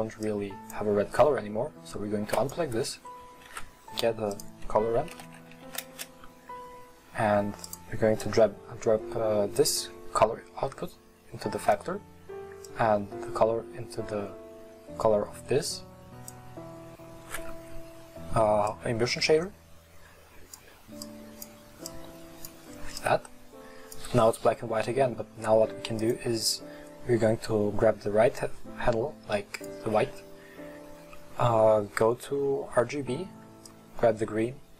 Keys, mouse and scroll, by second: 0.4-2.6 drag, 8.2 click, 12.7 drag, 21.0 click, 22.6 click, 23.2 click, 26.1 click.